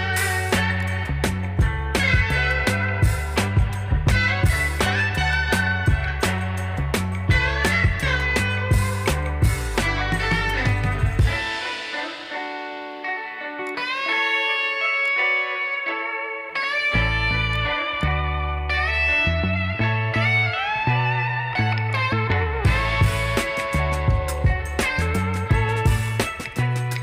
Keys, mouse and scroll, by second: 13.4-17.4 drag, 18.7 scroll down 1, 21.7-25.2 drag, 25.2 ctrl+z, 25.9 click.